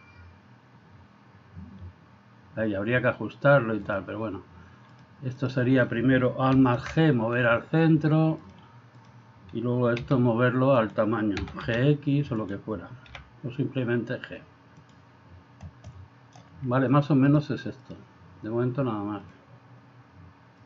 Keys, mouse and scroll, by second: 5.0-5.6 drag, 6.5 alt+g, 8.5-9.2 drag, 10.0 s, 11.4 s, 13.1 g, 15.9 middle click, 17.3-17.9 drag.